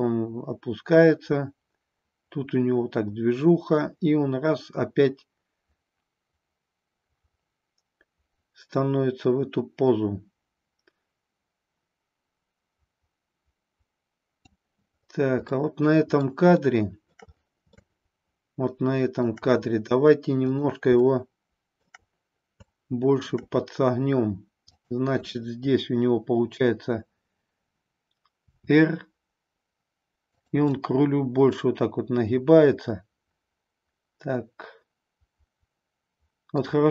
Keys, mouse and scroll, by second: 15.5-16.2 middle drag, 16.5-17.1 shift+middle drag, 17.7-19.2 shift+middle drag, 20.5 click, 21.1-22.0 shift+middle drag, 22.7-23.4 shift+middle drag, 24.7-27.7 drag, 28.3 r, 30.7-36.6 middle drag.